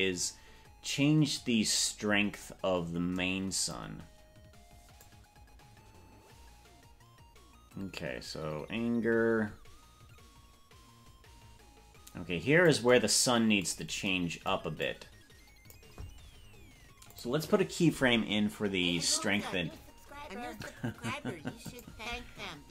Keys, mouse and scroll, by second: 5.1-12.8 drag, 14.9 click, 17.1 click.